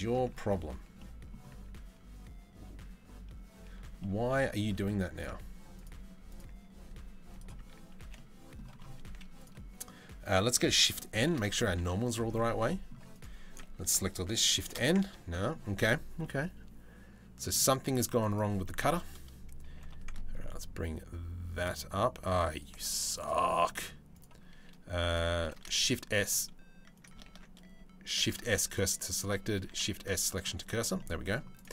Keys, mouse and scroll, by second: 0.6 middle click, 3.3 Tab, 3.6 middle click, 4.4 Tab, 4.8 middle click, 6.5 z, 7.2 Tab, 7.6 a, 7.8 middle click, 8.7 z, 10.9 shift+n, 11.3 z, 12.2 Tab, 13.1 Tab, 13.3 a, 14.2 shift+n, 14.7 Tab, 14.9 middle click, 15.8-17.2 middle drag, 19.3 g, 22.7 right click, 23.7 right click, 25.4 shift+d, 27.1 ctrl+z, 27.8 shift+s, 29.3 shift+s, 30.6-31.0 middle drag, 31.6 Tab.